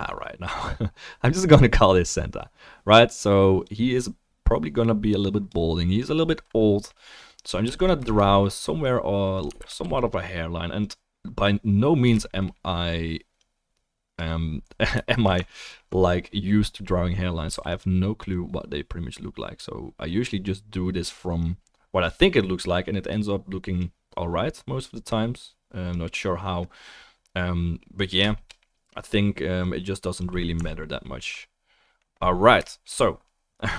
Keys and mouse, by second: 7.7 f, 7.8 shift+click, 9.6 ctrl+z, 9.8 f, 10.1 click, 15.3 alt+click, 15.3 alt+middle click, 15.3 alt+right click, 15.6 alt+click, 15.6 alt+right click, 17.5 f, 17.8 click, 28.3 shift+middle click, 30.8 alt+middle click, 31.1-33.7 alt+middle drag.